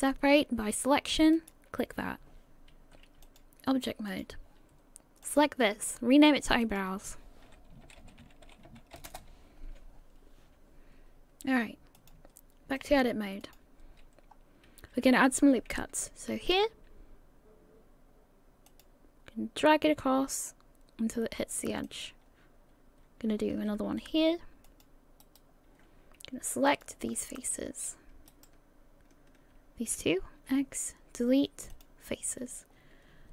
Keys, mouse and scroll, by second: 3.2 click, 9.2 click, 12.0 click, 14.3 click, 14.3 scroll up 3, 16.5 ctrl+r, 23.5 ctrl+r, 26.7 click, 27.4 right click, 28.3 shift+right click, 30.3 x.